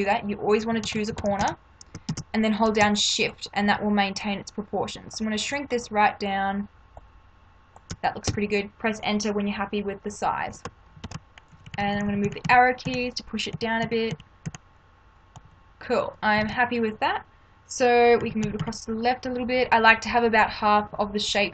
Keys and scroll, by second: 0.8 ctrl+-, 2.1 ctrl+t, 8.3 Return, 11.0 ctrl+=, 11.5 Down, 15.4 Up, 16.4 ctrl+=, 18.2 Left, 20.8 Left.